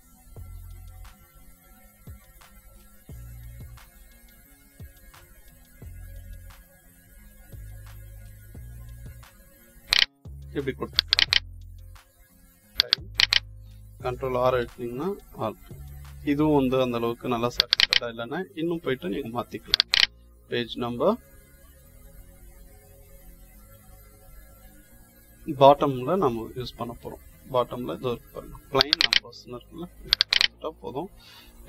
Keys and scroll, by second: 14.0 ctrl+r.